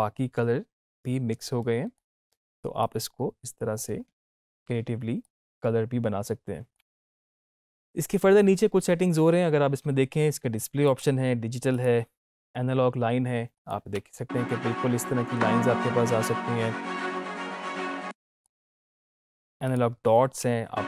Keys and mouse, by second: 10.8 click, 17.7 space.